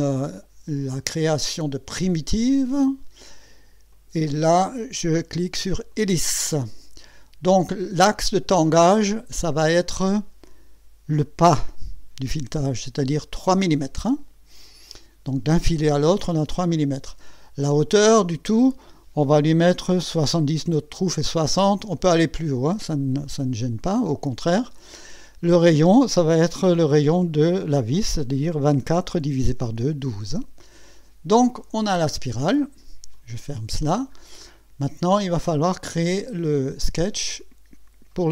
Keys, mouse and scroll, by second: 2.3 click, 3.9 click, 5.9 click, 9.2 click, 17.8 click, 21.5 KP_7, 21.7 KP_0, 23.2 click, 28.8 KP_1, 29.6 KP_2, 30.6 click, 33.1 click, 33.8-34.2 scroll down 2, 34.5-36.1 drag.